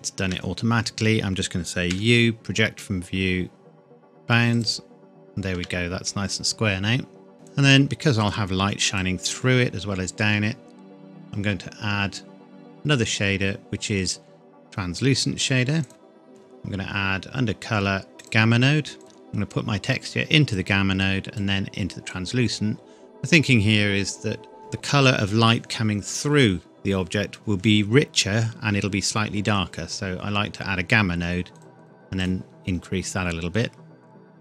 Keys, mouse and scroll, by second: 0.3 scroll down 1, 1.9 u, 4.5 click, 5.5 Tab, 7.3 scroll down 1, 7.4 click, 11.2 click, 15.8 click, 30.4-31.5 scroll up 1, 31.5 click.